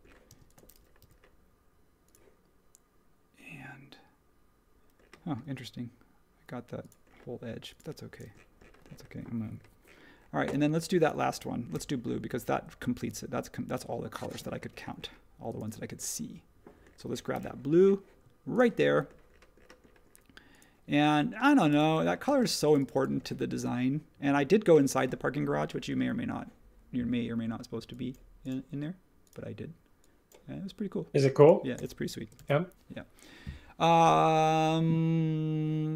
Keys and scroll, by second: 0.2 space, 1.0 m, 8.2 space, 11.7 m, 14.4 space, 17.3 b, 22.2 space, 32.3 super+s.